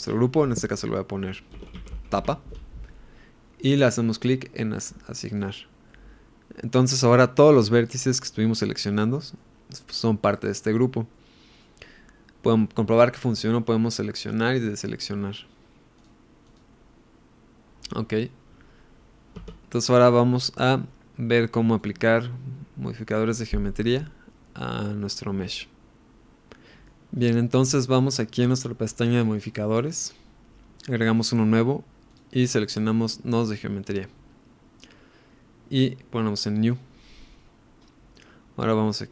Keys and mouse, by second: 5.3 click, 5.9-7.1 middle drag, 8.1-9.4 middle drag, 11.1 middle click, 13.2 middle click, 14.2 drag, 14.7 click, 15.2 middle click, 16.5 click, 19.4 Tab, 19.8-20.2 middle drag, 22.2-23.0 middle drag, 23.7-24.0 middle drag, 26.6 middle click, 29.3 click, 31.1 click, 32.0-33.9 drag, 36.6-39.1 drag.